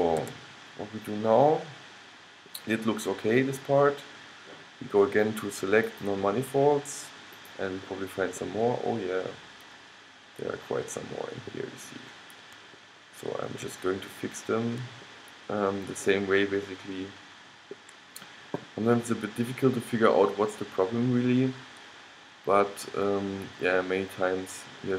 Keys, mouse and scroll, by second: 0.4 a, 1.1-3.6 middle drag, 8.6-10.5 middle drag, 12.9-18.8 middle drag, 19.6-21.5 middle drag.